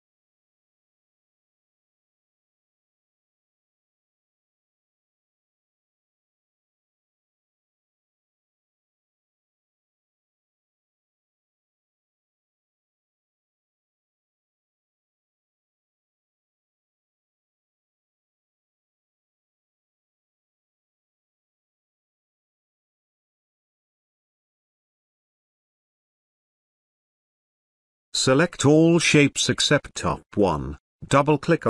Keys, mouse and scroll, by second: 0.8 right click, 3.2 click, 7.0 ctrl+z, 7.8 right click, 9.8 click, 11.0 space, 11.2-11.9 ctrl+drag, 15.5-16.1 ctrl+click, 16.3-16.7 scroll up 1, 17.5 click, 21.7 Caps_Lock, 22.8-27.4 drag.